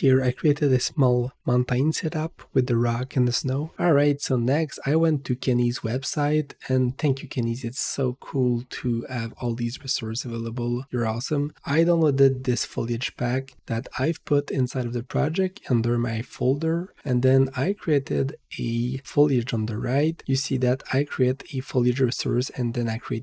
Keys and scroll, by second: 3.7 Return, 6.4-8.2 typing, 13.5 Return.